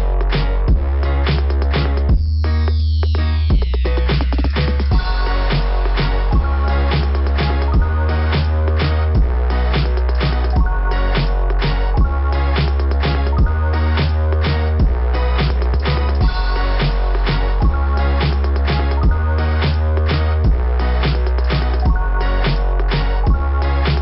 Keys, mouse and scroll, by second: 0.2 click, 2.8 click, 2.9 click, 4.7 click, 4.9 click, 5.2 click, 5.5 click, 11.4 scroll down 2, 13.2 click, 16.0 click, 16.3 click, 16.6 click.